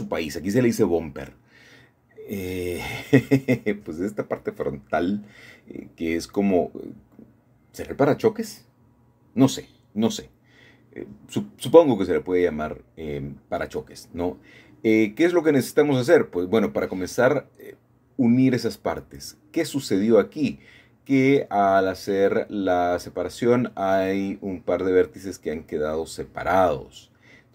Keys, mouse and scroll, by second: 0.6 click, 1.1 middle click, 2.3 middle click, 2.7-3.0 scroll up 1, 3.4 shift+middle click, 3.6 shift+middle click, 4.1-5.1 shift+middle drag, 7.4 n, 9.3 n, 11.1-13.1 drag, 13.9 Tab, 14.6 Tab, 15.1-17.3 drag, 18.0 1, 18.8-21.9 middle drag, 21.9-22.3 typing, 22.3 middle click, 23.4 typing, 23.9 click, 25.9 m.